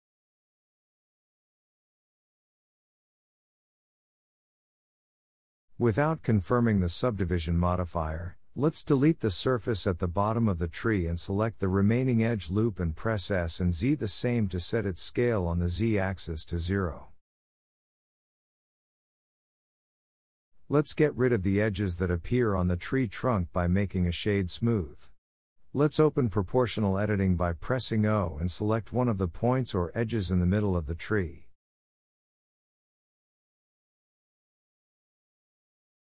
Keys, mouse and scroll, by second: 3.4 click, 4.4 ctrl+z, 4.8 ctrl+z, 5.4 ctrl+z, 5.9 ctrl+z, 6.9 Tab, 7.4 shift+middle click, 7.5-7.9 scroll up 2, 7.9 ctrl+r, 10.7 ctrl+z, 11.0 click, 11.7 3, 11.9 click, 12.6 x, 14.0 2, 14.4 alt+click, 14.8 s, 16.8-17.6 scroll down 2, 17.6 KP_3, 18.4 scroll down 1, 18.6 a, 18.9 g, 21.0 Tab, 21.1 click, 21.4 scroll down 2, 21.6-24.6 middle drag, 24.6-25.4 scroll up 4, 25.4 click, 25.6-26.4 right drag, 26.4 click, 26.7-27.8 middle drag, 27.8 Tab, 28.0 click, 28.8-29.5 scroll down 3, 29.0 Tab, 29.5-29.8 shift+middle drag, 29.8 Tab, 30.0-31.6 middle drag, 31.6 click, 32.1 r, 33.5 o, 34.0 r.